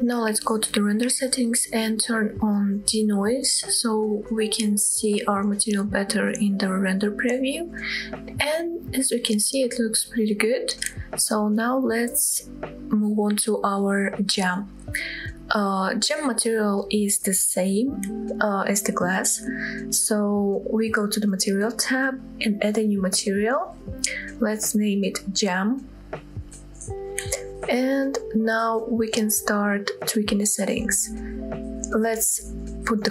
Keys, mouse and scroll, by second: 0.1 click, 2.6 click, 4.0-4.5 scroll up 3, 8.7 scroll down 2, 8.9-9.4 middle drag, 9.5-9.9 scroll up 2, 9.9-10.8 middle drag, 10.2 scroll up 1, 13.0 click, 14.4 click, 20.9-21.3 drag, 21.3-21.7 scroll down 1, 21.7 middle click, 22.7 click, 23.8 click, 24.3-26.6 drag, 29.9-31.3 scroll down 1, 31.3 click.